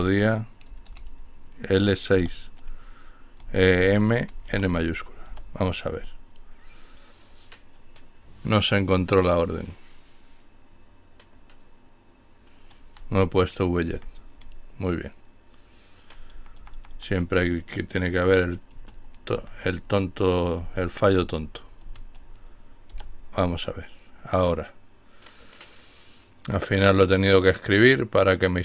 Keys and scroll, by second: 1.1 typing, 2.4-3.6 typing, 4.3 Return, 13.2 Up, 13.5 Left, 18.4 typing, 19.7-22.4 typing.